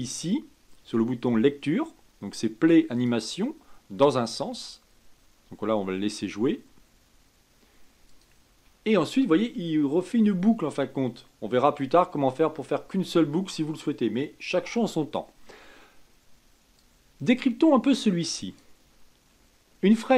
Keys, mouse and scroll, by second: 3.0 click, 8.1 click, 16.7-19.3 drag.